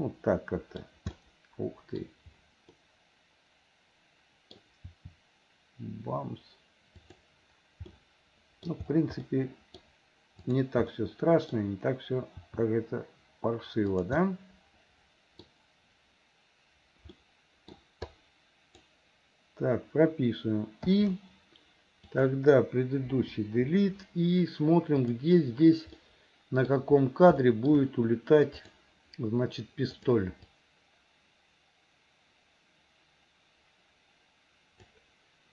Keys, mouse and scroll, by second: 1.3 middle click, 2.8-4.6 middle drag, 4.8 r, 7.9 middle click, 9.3 middle click, 10.5 click, 11.0 middle click, 12.5 r, 14.3-15.5 middle drag, 17.2 middle click, 18.2 click, 21.0 i, 22.0 click, 23.2 Delete, 25.1 click, 26.0 middle click, 27.4 shift+middle click, 28.7 click, 30.0 click, 30.6-35.0 drag.